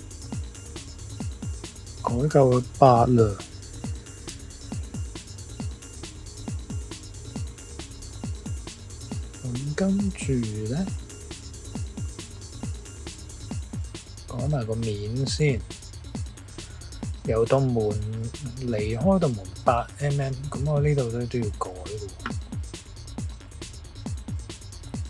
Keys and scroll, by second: 3.9 -, 4.2 8, 4.7 Return.